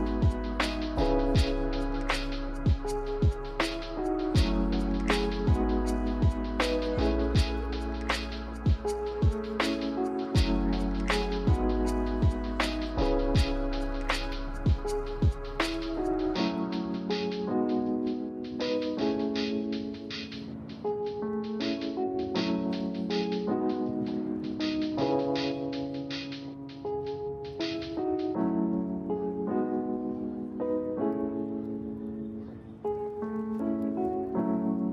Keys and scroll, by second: 4.0 1, 5.5 z, 13.6-16.2 typing, 21.4 z, 27.5-28.5 typing, 31.2 x, 32.4 x.